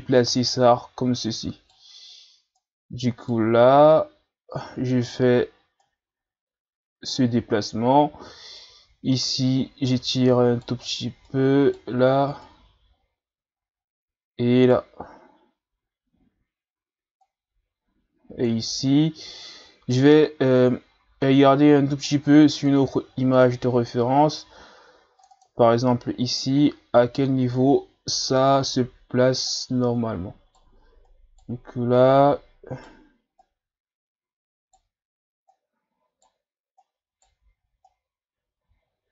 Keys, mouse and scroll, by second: 2.6 Right, 3.9 Right, 3.9 right click, 5.8 Right, 5.8 right click, 8.6 Right, 8.6 right click, 11.3 Right, 11.3 right click, 15.8 ctrl+scroll up 4, 17.2-18.9 drag, 18.9-20.0 ctrl+scroll up 1, 22.0-25.6 drag, 29.5 right click, 31.1 right click, 32.0 right click, 33.4 right click, 35.5 right click, 36.8 right click, 37.9 right click.